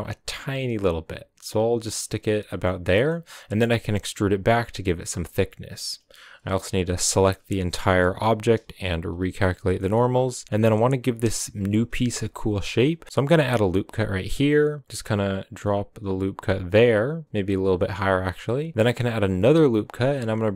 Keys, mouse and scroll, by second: 1.9-2.4 scroll down 4, 2.0 middle click, 2.4 middle click, 3.1-3.7 scroll up 3, 3.7 e, 5.0 shift+middle click, 5.4 right click, 7.0 l, 7.8 scroll up 1, 7.9-9.1 middle drag, 9.1 shift+n, 9.7 middle click, 10.0 right click, 10.2-12.2 middle drag, 12.2-12.9 scroll up 1, 12.9 ctrl+r, 18.6 ctrl+r.